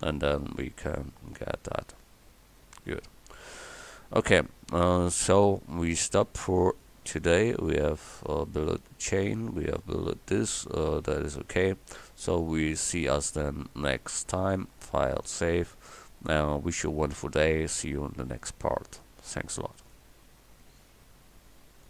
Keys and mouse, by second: 1.8-5.4 middle drag, 5.5-6.9 middle drag, 8.1 middle click, 15.3-19.9 drag.